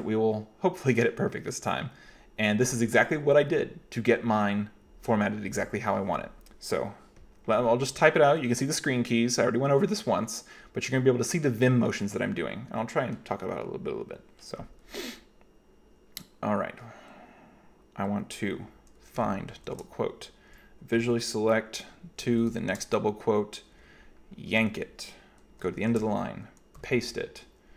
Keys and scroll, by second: 19.2 f, 19.7 shift+', 21.0 v, 22.2 f, 22.7 shift+', 24.5 y, 25.8 shift+4, 26.8 p.